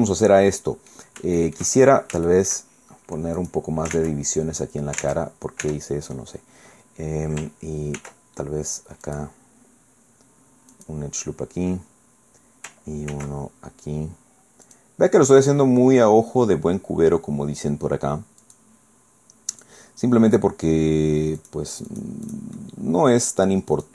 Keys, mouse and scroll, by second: 1.4 shift+click, 2.3 shift+click, 2.7 shift+scroll up 1, 2.9 shift+middle click, 3.4 click, 5.0 ctrl+Tab, 8.0 ctrl+r, 9.1 click, 10.7 click, 13.1 ctrl+r, 14.7 click, 18.4 click, 19.5 click, 21.4 click, 21.9 click, 22.3 click, 22.6 middle click, 23.7 click.